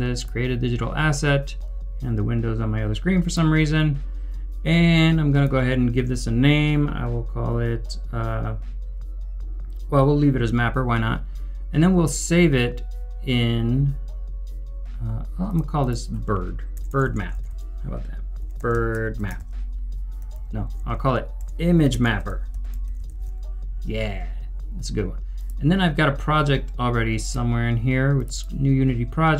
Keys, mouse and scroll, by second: 15.7 right click, 15.8 double click, 16.7 BackSpace, 18.1-23.7 typing, 28.3 double click.